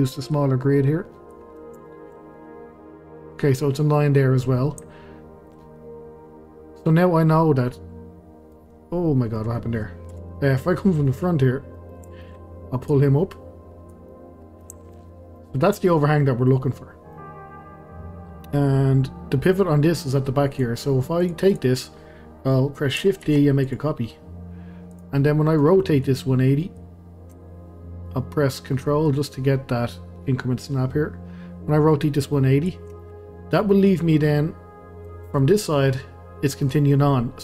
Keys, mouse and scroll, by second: 0.3 click, 1.5 scroll down 1, 1.8-2.5 shift+middle drag, 2.5-2.9 scroll up 1, 4.1-4.9 scroll down 1, 4.9-7.4 shift+middle drag, 7.4 scroll down 1, 7.7-8.7 middle drag, 8.7-9.2 scroll down 1, 9.3-10.1 middle drag, 10.1 KP_Decimal, 10.7-11.1 scroll down 1, 11.1-11.5 middle drag, 11.5 scroll up 1, 11.7-12.9 middle drag, 12.9 click, 14.1-15.1 middle drag, 15.1 scroll up 1, 15.4-18.7 middle drag, 18.7-20.5 scroll down 1, 20.5 click, 21.2 drag, 21.5 click, 23.2 shift+d, 24.9 click, 25.2 scroll down 2, 25.5-26.7 middle drag, 26.7 click, 33.0-35.8 middle drag, 35.8-37.0 scroll up 1, 37.0 scroll down 1, 37.1-37.4 middle drag.